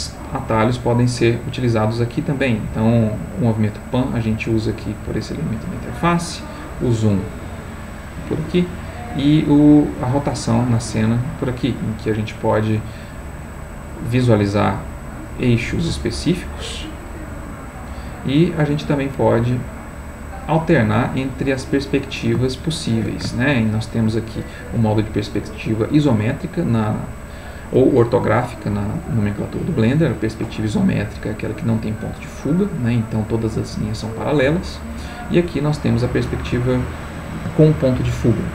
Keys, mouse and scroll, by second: 3.0-6.2 drag, 6.5-12.7 drag, 16.2 click, 17.2 click, 18.1-19.5 middle drag, 20.6 click, 22.5 shift+middle click, 23.3 ctrl+shift+middle click, 31.3-32.6 middle drag, 34.9 click, 35.6 middle click, 36.7-38.5 ctrl+middle drag.